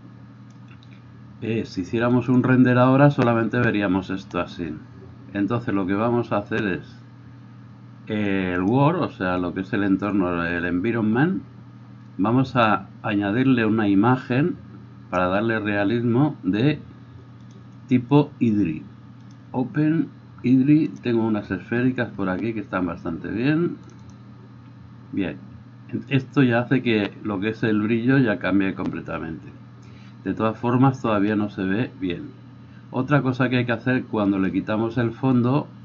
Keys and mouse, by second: 2.3-6.5 middle drag, 6.5-24.2 drag, 24.2-35.4 middle drag, 31.1 Escape, 35.4-35.8 drag.